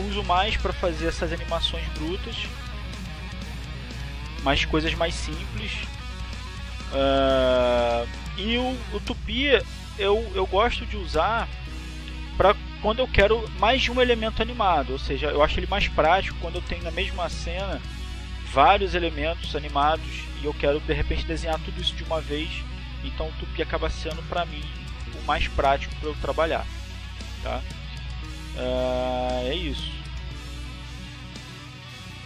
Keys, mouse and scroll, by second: 2.4-3.6 drag, 4.8-5.8 drag, 7.4-11.7 drag, 12.8-15.8 drag, 16.4-17.4 drag.